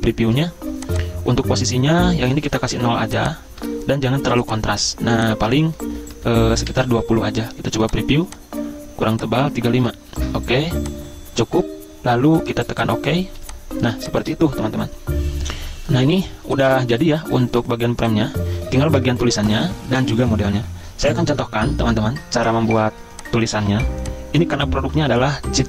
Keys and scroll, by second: 2.3 0, 3.7 0, 6.5-7.4 typing, 9.5-10.2 typing, 13.3 z, 17.5 v, 22.7 z.